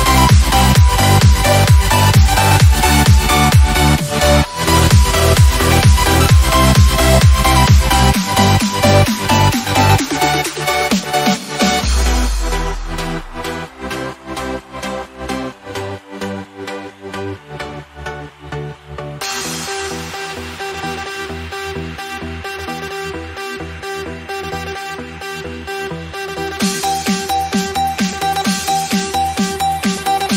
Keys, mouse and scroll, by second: 0.2 click, 3.2 BackSpace, 5.5 Return, 21.3 click, 24.7-25.5 typing, 25.0 click, 27.3 click, 30.2 click.